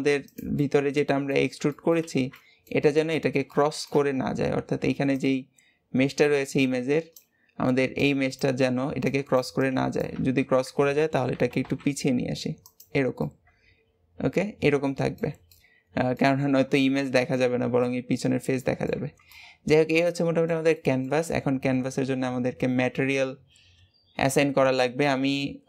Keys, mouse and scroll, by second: 0.6-2.0 middle drag, 2.0 alt+z, 2.3-10.4 middle drag, 13.2-16.4 middle drag, 16.4-16.8 scroll down 2, 16.8-18.2 shift+middle drag, 18.2-18.6 scroll down 2, 18.6 middle click, 19.0 Tab, 19.2 scroll down 1, 19.3-23.8 middle drag, 24.2-25.6 drag.